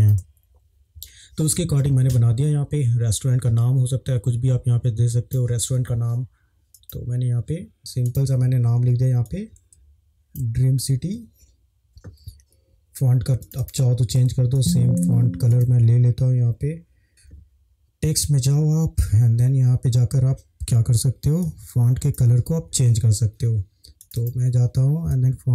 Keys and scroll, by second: 7.7 typing, 17.0 alt+r.